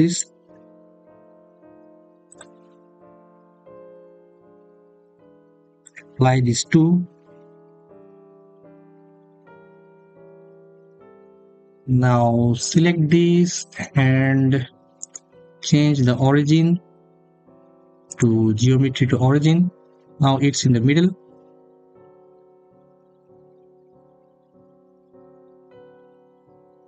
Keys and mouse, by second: 5.6-8.9 drag, 12.5 click, 14.8-18.9 drag.